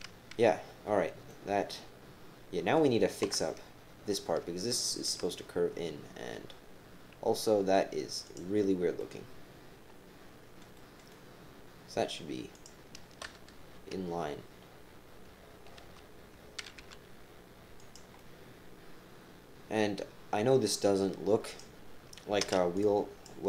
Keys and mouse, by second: 1.3-2.7 drag, 1.3-2.7 middle drag, 3.2 KP_7, 4.0 middle click, 4.4 shift+middle click, 4.7 shift+click, 4.8 shift+middle click, 4.9 shift+click, 4.9 shift+middle click, 5.3-7.0 drag, 7.0 right click, 8.3 click, 9.0-10.6 right drag, 10.7 right click, 11.1 right click, 11.6 middle click, 15.8 g, 18.1-20.3 drag, 21.5 click, 22.4 b.